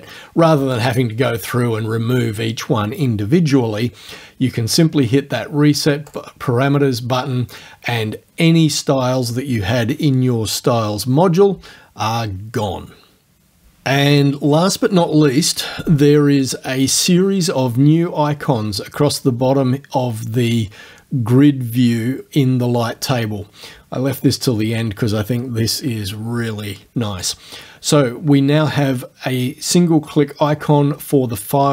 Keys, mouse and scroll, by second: 6.1 click.